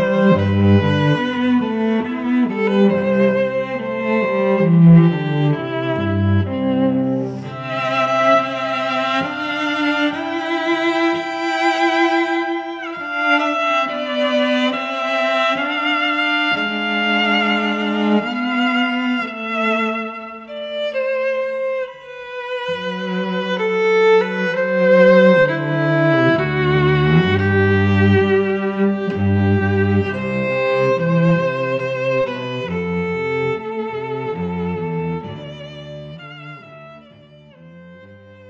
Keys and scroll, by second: 7.8 Return, 9.5 space, 11.6 space, 12.4 ctrl+alt+l, 15.4 Return, 22.1 Return, 23.4 space, 23.8 Tab, 27.0 space, 33.8 a.